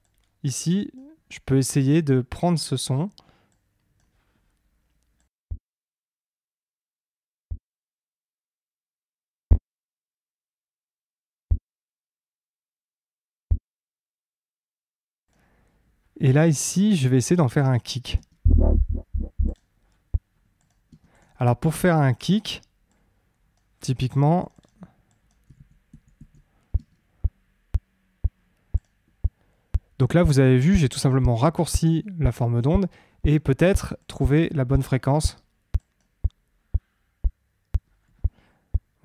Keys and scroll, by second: 5.4 space, 14.7 space, 18.1 space, 20.8 space, 25.5 super+d, 26.7 space.